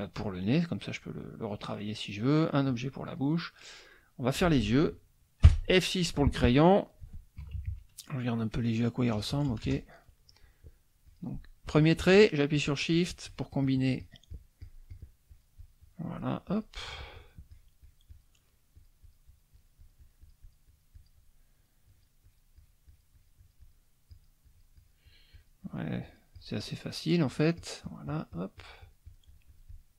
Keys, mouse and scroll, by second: 0.3-2.4 drag, 2.7-3.7 drag, 3.8 middle click, 7.4 KP_Subtract, 9.1 KP_Add, 11.0 click, 12.5 shift+click, 13.3 shift+click, 13.6 shift+click, 15.3-16.4 shift+drag, 16.5-18.3 shift+drag, 18.7-21.2 shift+drag, 21.5 shift+click, 22.3-23.9 shift+drag, 24.1 shift+click, 24.4-26.0 shift+drag, 26.0-29.9 shift+drag.